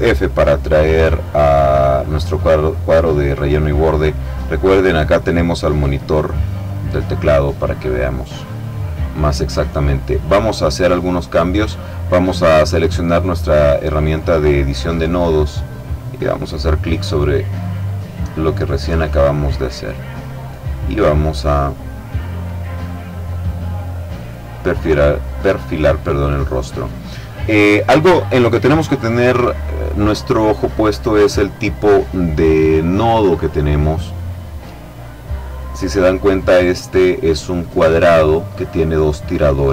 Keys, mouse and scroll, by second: 2.1 click, 6.7 click, 7.5-8.8 drag, 9.9 click, 16.0 click, 18.2-20.4 drag, 20.7-22.7 drag, 23.4-26.4 drag.